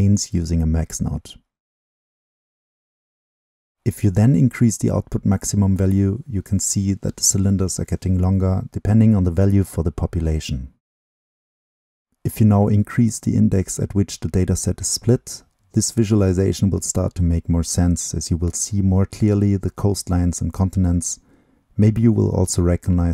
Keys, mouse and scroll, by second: 3.5-4.3 middle drag, 4.3 click, 4.4-7.3 right drag, 13.3-14.3 middle drag, 14.3-15.2 scroll up 2, 15.2-19.5 middle drag, 19.5-20.5 right drag, 20.5-23.1 drag.